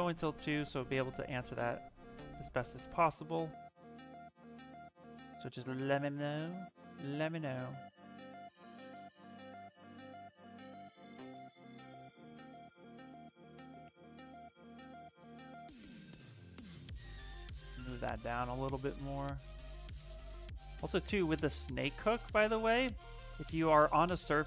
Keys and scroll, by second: 3.9 s, 6.2 b, 6.5 s, 22.6 s.